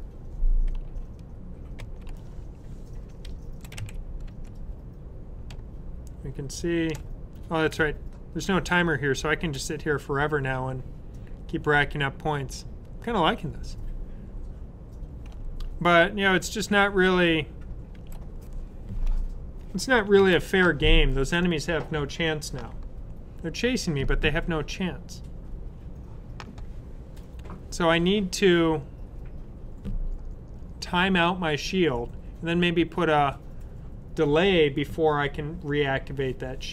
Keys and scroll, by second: 9.1 typing, 12.1 typing, 17.8 super+w.